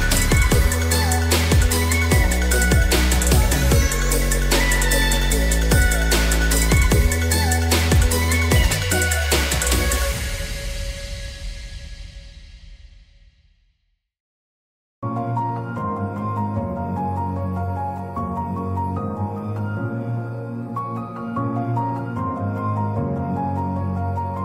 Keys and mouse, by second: 0.5 click, 1.2 click, 2.5-3.8 drag, 5.5 click, 6.6 click, 7.1 click, 8.9 click, 11.2-12.6 middle drag, 13.5-14.7 middle drag, 15.6 click, 17.7 click, 18.9 click, 19.7-22.7 drag.